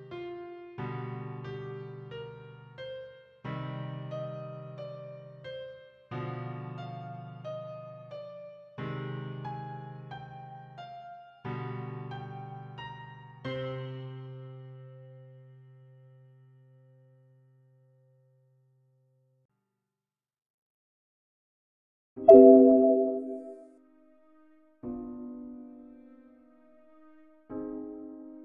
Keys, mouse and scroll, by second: 1.3 shift+click, 4.2 shift+click, 20.6 click, 21.5-22.6 typing, 24.2 g, 25.7 click.